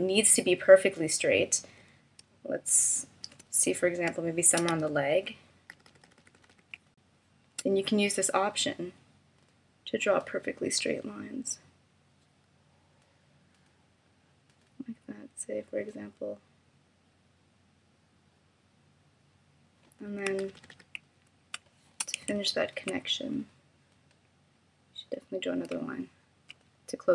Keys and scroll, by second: 3.2 shift+m, 4.5 super+=, 6.1 space, 20.5 super+=, 21.6 space.